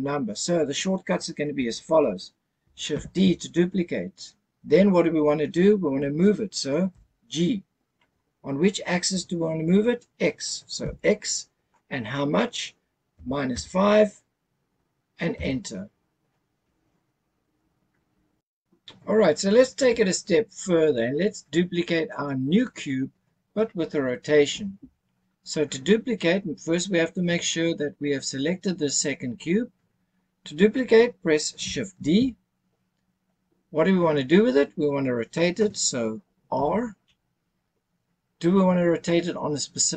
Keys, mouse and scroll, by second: 3.0 shift+d, 6.9 g, 10.8 x, 13.1 KP_Subtract, 13.5 KP_5, 15.3 KP_Enter, 32.1 shift+d, 36.5 r.